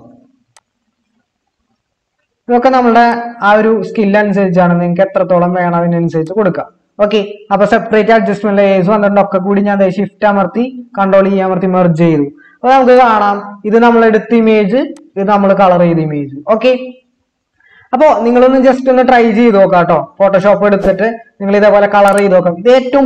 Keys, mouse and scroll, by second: 9.8 shift+click, 11.1 ctrl+e.